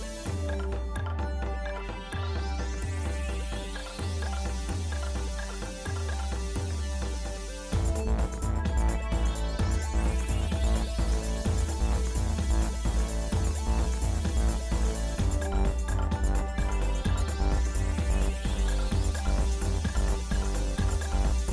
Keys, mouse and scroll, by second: 0.4 shift+middle click, 2.4 click, 3.6-4.1 scroll down 1, 4.1 scroll down 2, 4.2 shift+middle click, 4.8 scroll up 2, 6.6 shift+middle click, 7.7 middle click, 8.2-9.9 shift+middle drag, 10.1 middle click, 11.0 click, 11.9 click, 12.3 Tab, 13.0-13.4 scroll up 2, 13.9 click, 14.4-15.8 shift+middle drag, 17.9 KP_1, 18.8 ctrl+Tab.